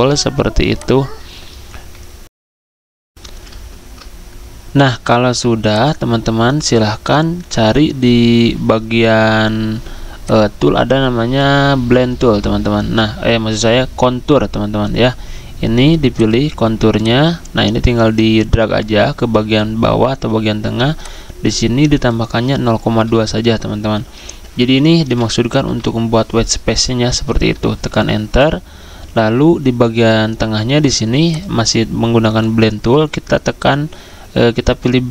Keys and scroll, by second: 0.0-0.4 typing, 3.1 alt+Tab, 3.5 alt+Tab, 22.9 2, 27.8 Return.